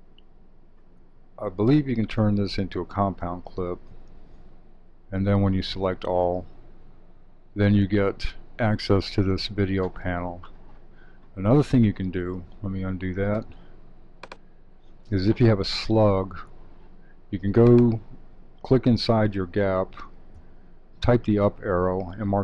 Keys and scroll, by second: 3.1 alt+c, 5.5 super+a, 12.5 super+z, 20.3 Up.